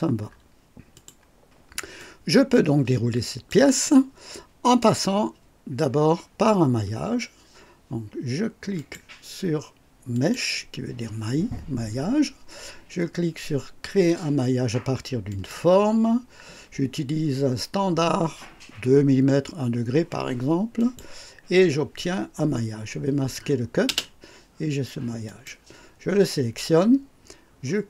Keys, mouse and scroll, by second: 0.8 click, 1.9-3.6 drag, 4.5 click, 8.7 click, 10.0 click, 15.2 click, 20.7 click, 23.8 space, 25.1 click.